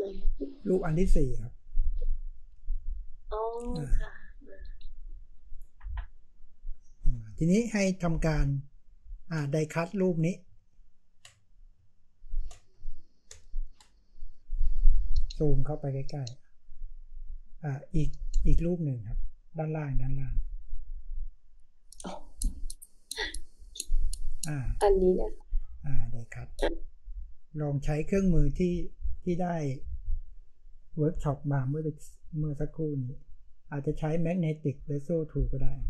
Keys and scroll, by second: 8.4 space.